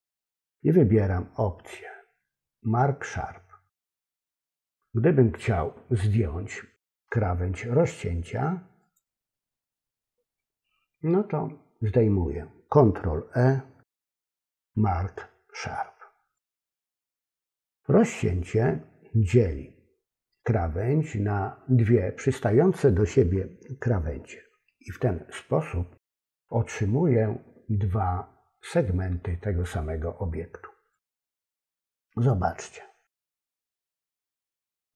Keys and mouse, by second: 13.9 ctrl+e, 30.9 click.